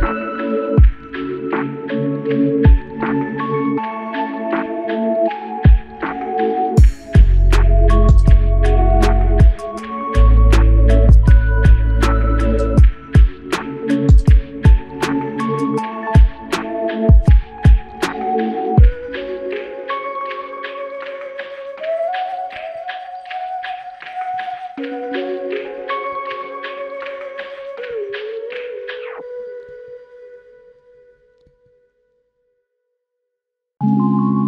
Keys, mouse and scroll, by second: 8.0 ctrl+click, 13.7 double click, 21.6 ctrl+click.